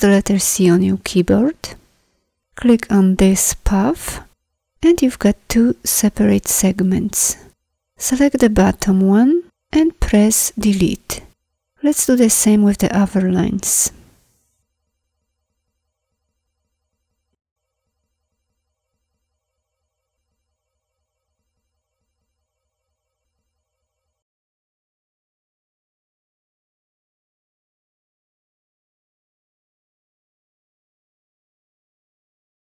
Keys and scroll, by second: 10.5 Delete.